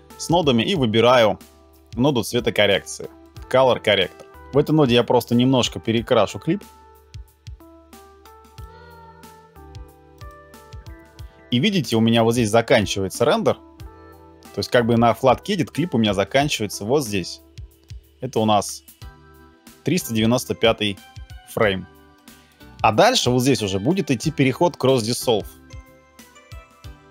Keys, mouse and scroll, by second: 1.5 c, 3.3 Down.